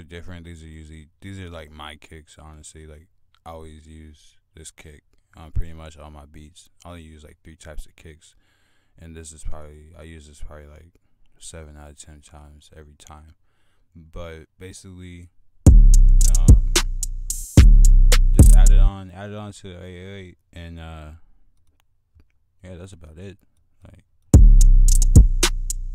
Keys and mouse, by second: 2.2-3.5 drag, 15.4-15.7 drag, 15.8-17.0 drag, 17.6-19.4 drag, 20.0-20.4 drag, 20.8 typing, 22.1 click.